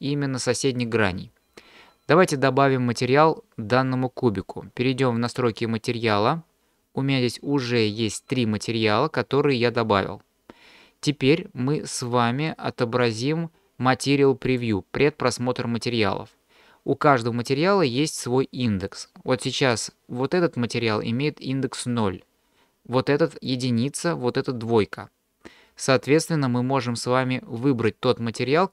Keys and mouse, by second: 5.2 click, 14.6 click, 19.6 click, 23.5 click, 24.3 click.